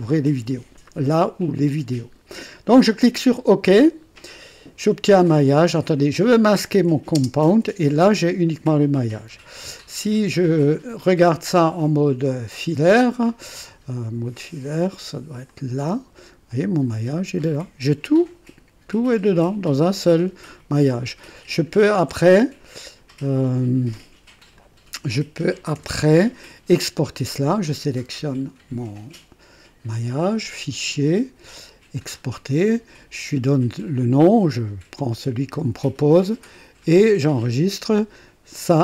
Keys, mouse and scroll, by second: 3.4 click, 7.1 space, 14.3 click, 15.5 click, 16.5-19.9 drag, 20.8 F1, 21.9 Escape, 24.5 click, 25.7 1, 26.4 click, 28.1 click, 30.1 click, 31.9 click.